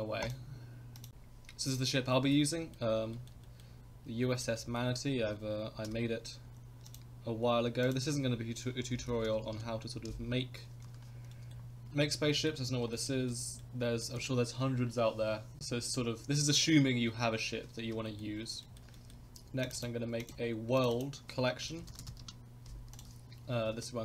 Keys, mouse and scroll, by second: 0.2-1.1 drag, 2.1 shift+middle drag, 2.5 middle drag, 3.1 shift+middle drag, 3.4 middle drag, 4.3 shift+middle click, 4.6 middle drag, 5.2 scroll up 1, 5.8 n, 6.9 click, 7.8-10.3 drag, 10.8 n, 11.3 middle drag, 12.0 shift+middle drag, 12.3 middle click, 12.6 scroll down 2, 12.9 shift+middle drag, 13.3-13.6 middle drag, 14.0 shift+middle drag, 15.6-15.9 middle drag, 18.0 shift+middle click, 18.6 shift+middle drag, 18.9 middle click, 19.6 click, 19.7 right click, 20.7 click, 20.9-23.7 drag, 23.7 shift+a.